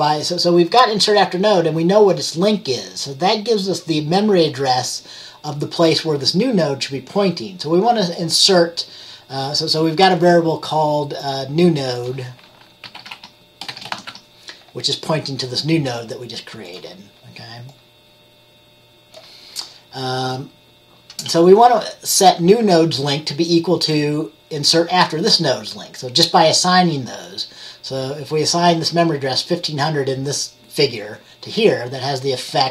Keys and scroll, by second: 12.7-14.7 typing.